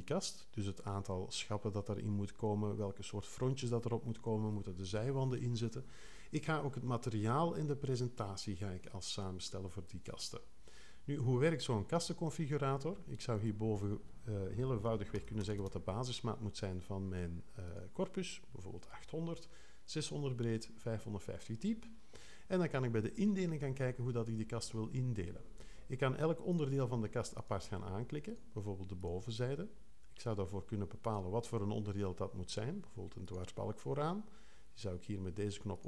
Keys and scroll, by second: 14.9-15.9 typing.